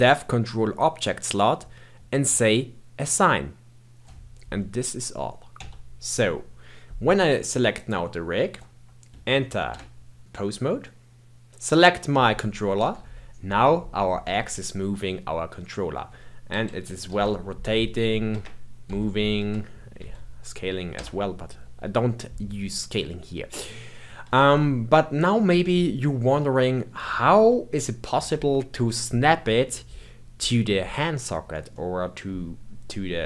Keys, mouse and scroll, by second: 3.0-5.4 drag, 5.4 Tab, 7.7 click, 9.2 ctrl+Tab, 11.5 click, 12.7 g, 17.0 r, 18.8 g, 24.5-25.5 shift+middle drag, 25.5-25.9 scroll down 1, 25.9-30.7 middle drag, 31.7-33.2 middle drag.